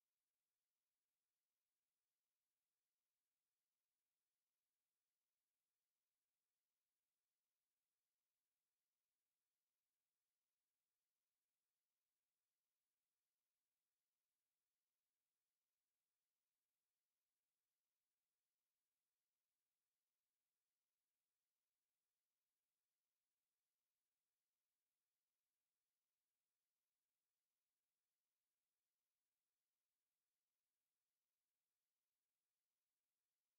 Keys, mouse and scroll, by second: 0.8 click, 2.1 click, 2.8-3.1 scroll up 1, 3.3 scroll up 1, 4.2 right click, 7.8 click, 9.1 click, 10.6 KP_1, 11.2 KP_Enter, 13.2-14.5 drag, 15.2 click, 16.9 click, 19.5 click, 21.4 KP_1, 21.8 KP_Enter, 23.4 click, 26.1 click, 27.2-27.6 scroll up 2, 28.0-30.0 right drag, 33.0 click.